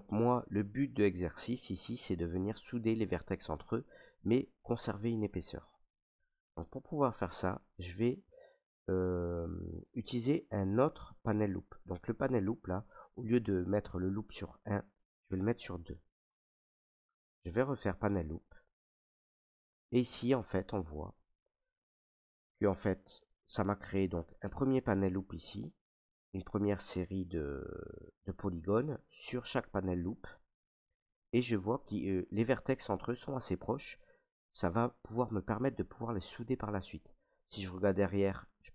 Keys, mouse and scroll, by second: 0.5 alt+right click, 3.0 right click, 3.7 right click, 5.8 right click, 6.4 ctrl+right click, 7.0 right click, 7.5 ctrl+right click, 10.6 ctrl+z, 14.8 click, 15.9 2, 16.2 Tab, 18.3 click, 20.0 right click, 21.5 ctrl+right click, 28.7 right click, 31.0 right click, 31.8 ctrl+right click, 37.0 ctrl+right click, 38.2 right click.